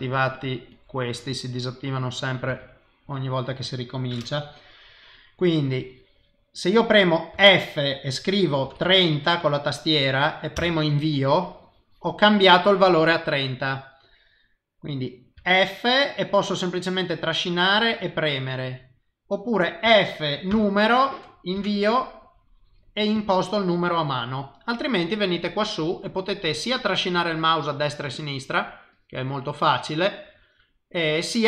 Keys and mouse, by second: 5.6 click, 7.3 f, 11.3 click, 18.0 click, 19.8 f, 22.2 click, 23.1 click, 28.1 click, 28.9 click, 30.1 click.